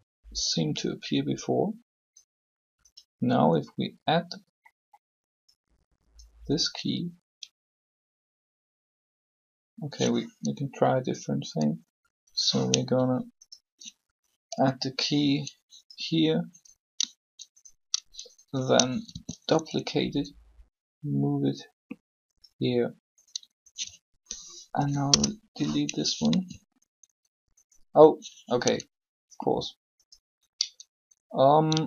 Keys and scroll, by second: 14.3 shift+i, 19.1 shift+d, 24.5 shift+Delete, 25.0 Return, 26.3 alt+a.